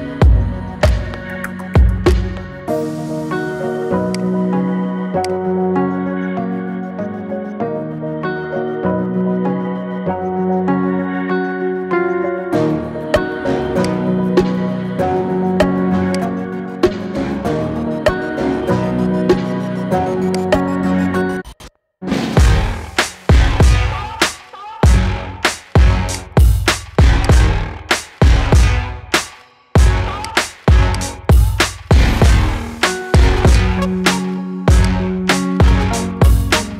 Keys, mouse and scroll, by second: 3.3 shift+d, 5.0-8.1 drag, 9.5 shift+d, 14.1 g, 16.5-17.4 shift+middle drag, 17.4 shift+d, 20.8 shift+d, 27.0 click, 27.7 g, 30.7 click, 31.7 g, 33.3 click, 34.6 click.